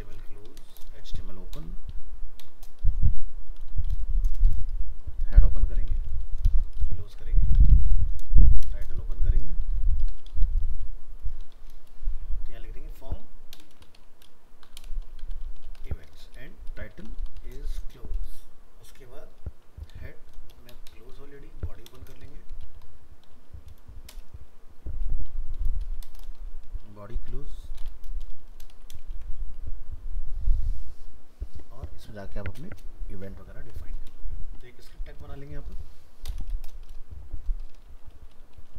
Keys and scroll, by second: 29.1 ctrl+s, 33.3 ctrl+s.